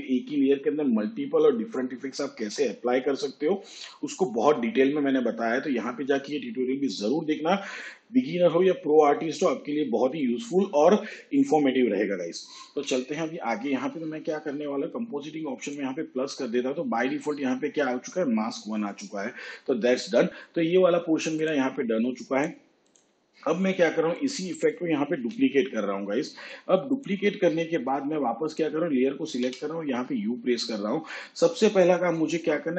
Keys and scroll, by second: 25.2 ctrl+d, 29.5 u.